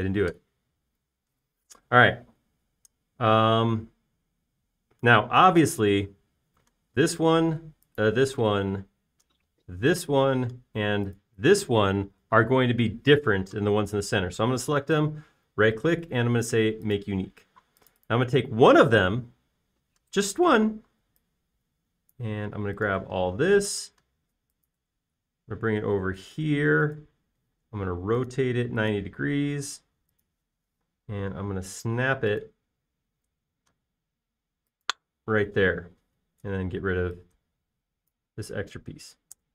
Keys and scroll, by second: 24.3 shift+m, 28.4 q, 31.9 m, 37.1 space.